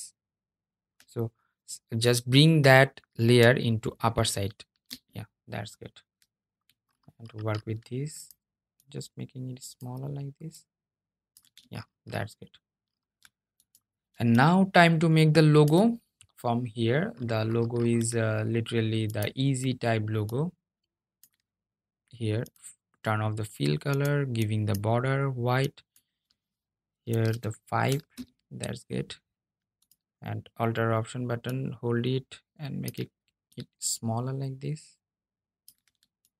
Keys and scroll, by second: 3.6 super+[, 3.8 super+[.